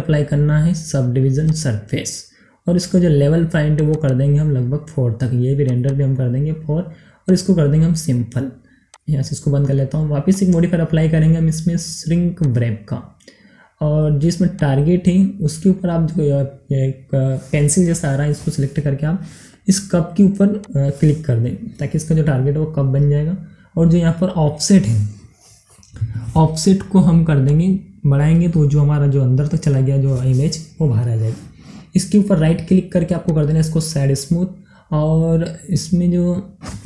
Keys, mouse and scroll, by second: 3.7 click, 16.3 click, 20.6 click, 23.1 scroll up 1, 27.4 click, 29.5 scroll up 1, 32.2 right click, 32.2 right click, 33.2 click.